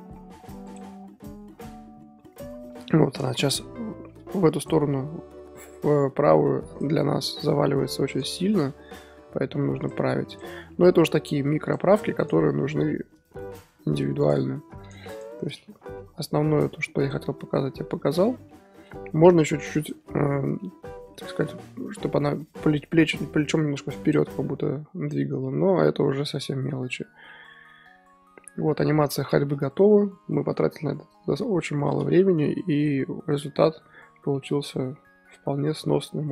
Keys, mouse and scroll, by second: 0.7 click, 1.6-2.4 middle drag, 2.4 scroll up 3, 3.4-4.6 drag, 4.9 KP_1, 5.1-5.4 scroll up 3, 5.3-8.2 drag, 7.0-8.2 scroll up 2, 9.3 r, 10.4 Left, 10.6 r, 12.3 Left, 12.6 r, 14.9 shift+Left, 15.1 shift+Left, 15.1 click, 15.9 i, 17.1-18.1 drag, 18.1-18.5 scroll down 2, 18.5-19.8 middle drag, 19.8-20.2 drag, 20.2-20.6 scroll up 3, 20.6-24.1 middle drag, 20.8 click, 20.9-24.8 drag, 24.8 scroll down 3, 25.1-25.8 middle drag, 25.8 scroll down 3, 26.1-28.8 middle drag, 28.8-29.3 scroll up 4, 29.3-36.3 shift+middle drag.